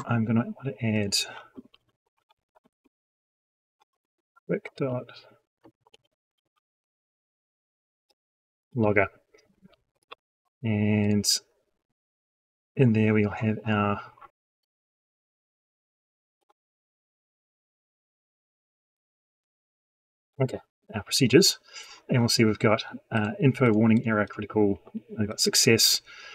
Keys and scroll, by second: 3.9 ctrl+space, 17.0 F3, 18.0 F3.